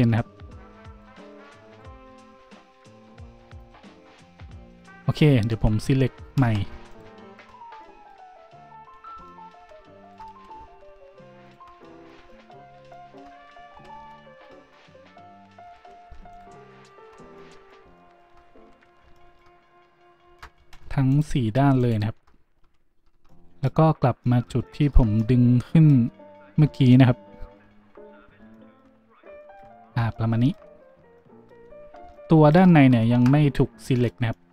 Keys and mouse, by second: 0.1 shift+g, 1.4 middle click, 1.8-4.6 middle drag, 2.3 g, 3.8 a, 4.6-6.9 shift+middle drag, 6.4 z, 6.9 alt+shift+click, 7.0 alt+shift+middle drag, 7.2 alt+shift+click, 7.3-8.8 alt+shift+middle drag, 8.8 click, 8.8 z, 8.9-9.5 shift+middle drag, 8.9 z, 10.0 alt+shift+click, 10.1-11.4 alt+shift+middle drag, 10.5 shift+z, 11.4 alt+shift+click, 11.5-13.7 alt+shift+middle drag, 13.7 z, 13.9 shift+middle click, 14.6-15.6 ctrl+middle drag, 15.7 middle click, 15.7 z, 16.3 alt+shift+click, 16.4 alt+shift+middle click, 16.8 alt+shift+click, 16.9-19.4 alt+shift+middle drag, 19.0 shift+z, 20.2 alt+shift+middle click, 20.8 alt+shift+z, 21.1 alt+shift+click, 21.2-21.8 alt+shift+middle drag, 21.8 alt+shift+click, 21.9-31.5 alt+shift+middle drag, 23.2 z, 32.0-32.6 shift+middle drag, 33.0-34.5 shift+drag, 33.0-34.5 shift+middle drag.